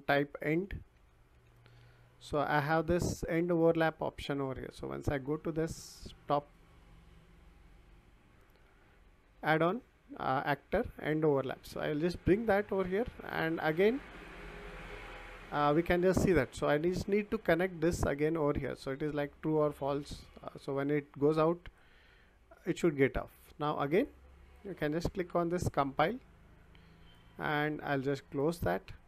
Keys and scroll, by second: 0.2-1.8 typing.